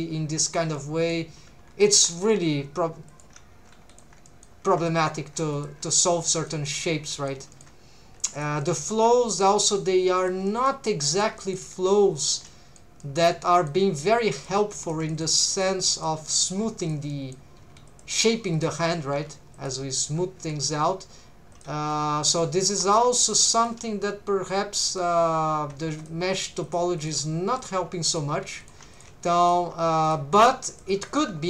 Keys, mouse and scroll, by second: 0.5 shift+click, 0.7 middle click, 2.0 click, 2.0 3, 2.3 g, 3.1 shift+click, 3.7 g, 3.9 shift+click, 4.3 middle click, 5.1 2, 5.5 click, 5.8 g, 6.1 shift+click, 6.5 middle click, 7.1 middle click, 7.5 middle click, 8.1 3, 8.3 click, 8.6 middle click, 9.3 middle click, 9.6 g, 10.2 shift+click, 10.5 middle click, 11.1 click, 11.4 middle click, 11.7 g, 12.2 shift+click, 12.5 middle click, 13.0 middle click, 14.0 g, 14.3 shift+click, 14.8 shift+middle click, 15.1 middle click, 15.5 click, 15.8 middle click, 16.5 g, 16.8 shift+click, 17.1 middle click, 17.6 g, 17.9 shift+click, 18.6 click, 19.2 g, 19.6 shift+click, 20.4 r, 21.5 click, 21.7 g, 22.3 shift+click, 22.7 1, 22.9 right click, 23.0 g, 23.6 shift+click, 24.5 click, 25.9 1, 26.0 click, 26.4 g, 26.6 shift+click, 27.0 click, 27.2 g, 27.6 shift+click, 28.1 click, 28.4 g, 28.6 shift+click, 28.9 click, 29.1 g, 29.4 shift+click, 30.0 right click, 30.0 click, 30.7 shift+click, 31.1 click, 31.3 g.